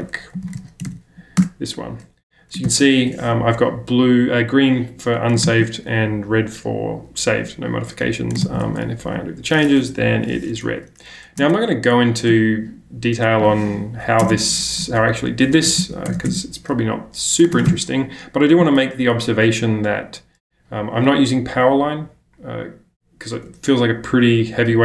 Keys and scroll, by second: 0.0-2.5 typing, 2.6 ctrl+k, 5.3 BackSpace, 5.4 ctrl+j, 8.4-9.9 typing, 8.4 ctrl+k, 11.4 super+Tab, 14.2 super+Tab, 15.7 space, 15.8 o, 16.1 BackSpace, 16.3 \, 17.5 BackSpace, 17.5 ctrl+space, 17.7 h.